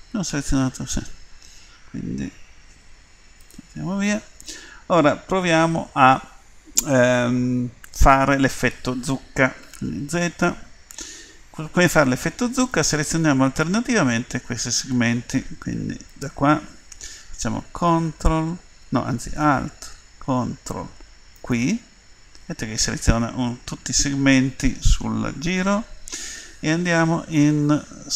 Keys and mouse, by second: 0.1 ctrl+z, 2.8 Delete, 4.2 click, 6.0-8.3 middle drag, 9.6 z, 16.1-25.9 drag.